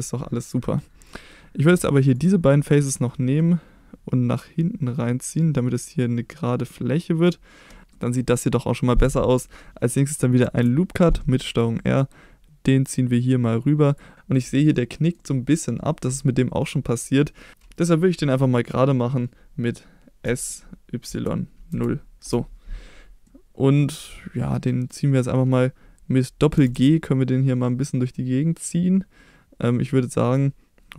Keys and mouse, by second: 2.1 shift+click, 3.1 middle drag, 4.4-7.2 drag, 8.0 middle click, 10.4 ctrl+r, 13.9 click, 14.1 shift+middle click, 14.7 middle click, 20.2 s, 21.1 y, 21.7 0, 22.2 Return, 23.2 middle click, 24.7 middle click, 26.5 g, 26.7 g.